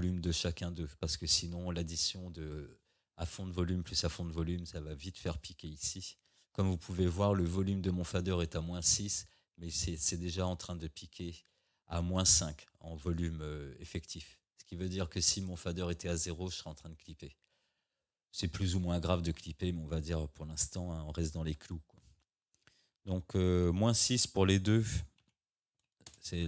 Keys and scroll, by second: 25.2 -, 26.1 Return.